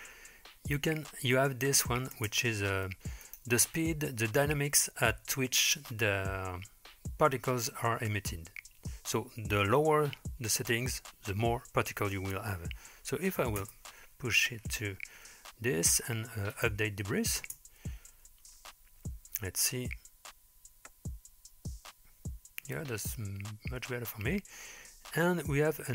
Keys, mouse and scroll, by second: 2.2 space, 3.2-13.7 drag, 16.5 click, 17.4 space.